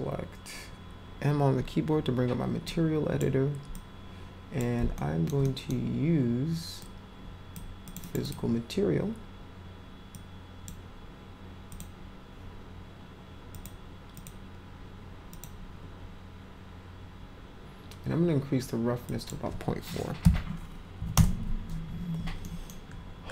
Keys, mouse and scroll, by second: 2.6-3.2 drag, 3.7 click, 4.9-5.3 alt+middle drag, 5.4 middle drag, 6.8-7.5 drag, 7.8 click, 8.0 click, 8.2 click, 10.1 click, 11.7 click, 13.5 click, 14.1 click, 15.3 click, 19.0 click, 20.2 ., 22.4 middle click.